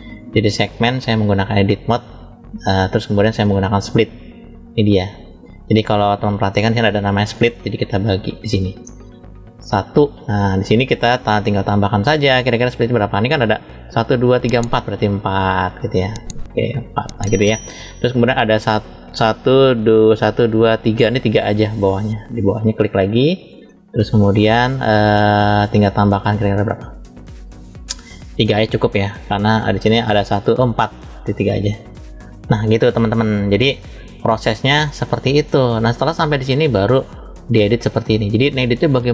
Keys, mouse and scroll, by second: 1.2-2.6 drag, 6.6 click, 7.5 middle click, 9.7 click, 11.4 click, 15.6 click, 16.4 click, 22.5 click, 23.5-24.5 shift+middle drag, 24.7-25.2 scroll up 1, 25.5-26.4 scroll up 1, 26.4 click, 28.7 shift+middle click, 31.6 click, 33.6 click, 34.2 scroll down 1, 35.5 click, 35.5 scroll down 1, 36.2 scroll up 1, 36.8 middle click.